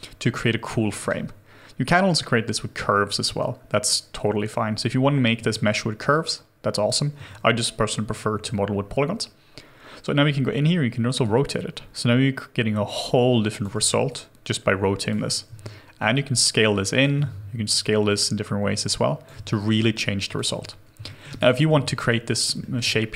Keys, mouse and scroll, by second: 0.3 alt+click, 0.9 alt+middle click, 3.6-4.0 scroll down 1, 4.0-5.3 scroll up 1, 6.9 w, 7.3 ctrl+z, 14.1 alt+click, 15.5 r, 17.2 ctrl+z, 19.5 alt+click, 21.8 alt+middle click, 22.2 alt+click, 22.6 alt+middle click.